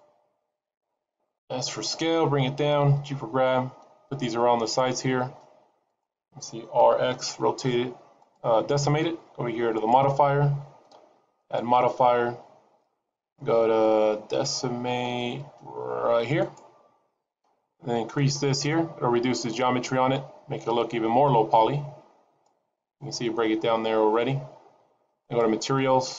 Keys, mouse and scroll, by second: 1.3 s, 2.9 g, 5.1 s, 6.8 r, 9.7 click, 11.5 click, 18.2 click, 23.3 scroll up 2, 24.3-25.2 scroll down 1, 25.2 click.